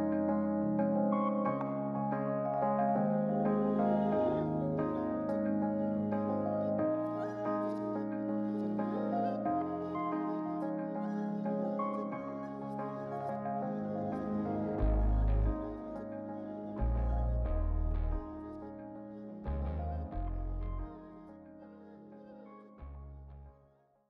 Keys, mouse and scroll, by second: 1.9 click, 3.8-5.5 drag, 5.9 middle click, 7.4 click, 10.5-10.9 scroll down 2, 11.6 click, 11.6 middle click, 12.1-12.5 scroll down 3, 13.2-13.8 scroll down 1, 14.3-15.3 middle drag, 14.3-15.0 scroll down 1, 16.7-17.8 drag.